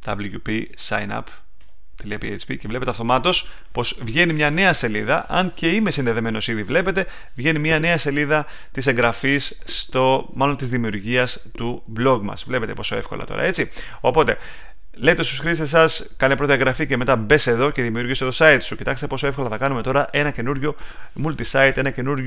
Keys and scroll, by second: 0.0-0.6 typing, 1.5 Return.